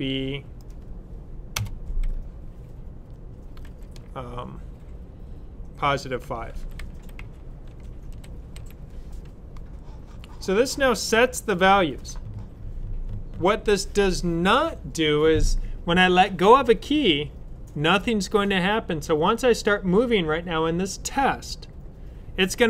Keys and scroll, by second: 3.5 typing, 5.9-8.4 typing.